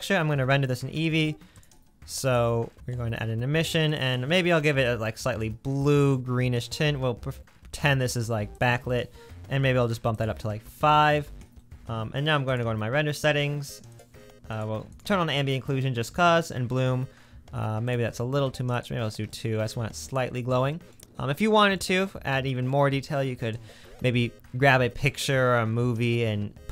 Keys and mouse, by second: 2.8 middle click, 3.9 click, 4.9-7.8 drag, 10.3-13.9 middle drag, 14.0 middle click, 14.6 middle click, 15.0-16.1 middle drag, 16.2 middle click, 20.5-21.0 middle drag, 21.1 middle click.